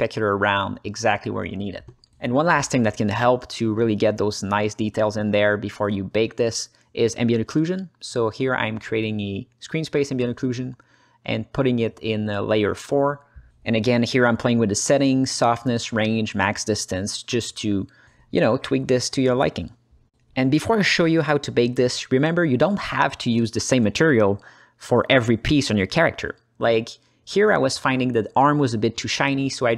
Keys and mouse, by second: 0.2-2.0 drag, 2.5 click, 3.0 middle click, 4.2-5.3 drag, 5.9 shift+a, 8.8-9.3 drag, 9.7 click, 10.8 ctrl+space, 13.9 ctrl+alt+h, 14.0 ctrl+alt+middle click, 14.4-15.5 drag, 15.9-17.1 drag, 17.5 ctrl+alt+middle click, 17.8 alt+shift+middle click, 19.0 click, 21.1 click, 23.3 click, 27.4-29.7 drag.